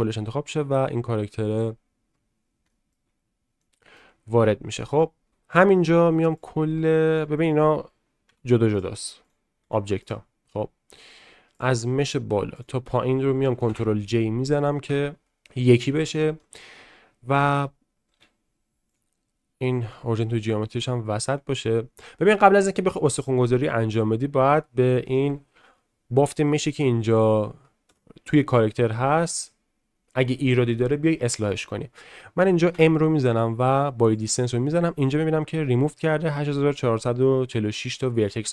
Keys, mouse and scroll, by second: 1.8 middle click, 2.7 shift+middle drag, 3.6-3.9 middle drag, 4.5 shift+middle drag, 4.8 middle drag, 7.4 click, 8.2 g, 9.2 click, 9.6 g, 13.7 ctrl+j, 16.4-17.7 middle drag, 18.1 q, 19.9-20.8 middle drag, 26.2 shift+middle drag, 27.9 Tab, 32.7 m.